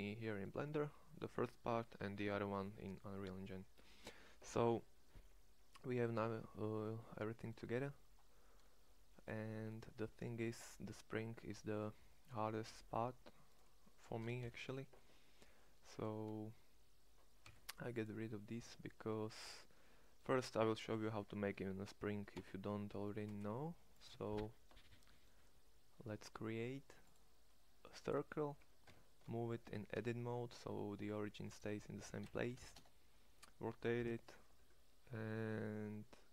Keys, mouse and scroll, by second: 5.7 middle click, 12.8 Tab, 14.5 ctrl+l, 17.5 x, 18.7 Tab, 22.3 2, 23.3 space, 28.9 Tab, 29.6 g, 32.0 r.